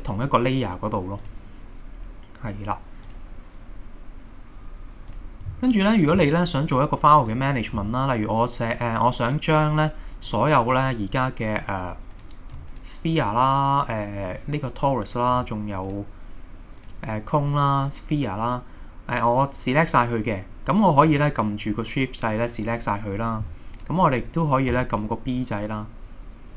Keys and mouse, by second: 5.1 click, 10.3 click, 12.2 click, 13.6 click, 15.9 shift+click, 24.8 b.